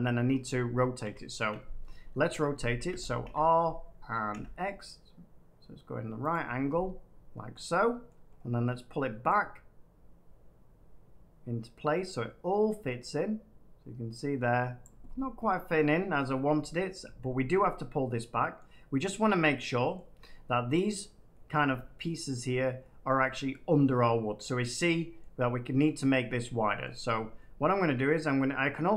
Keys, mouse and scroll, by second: 0.9 ctrl+3, 2.8-3.2 typing, 4.2 typing, 6.2 click, 7.4 middle click, 8.3-8.8 scroll down 1, 8.8 scroll down 1, 14.7 click, 15.0 middle click, 16.9 middle click, 18.5 middle click, 19.9 middle click, 21.4 middle click, 23.0-24.0 middle drag, 24.3-27.7 middle drag.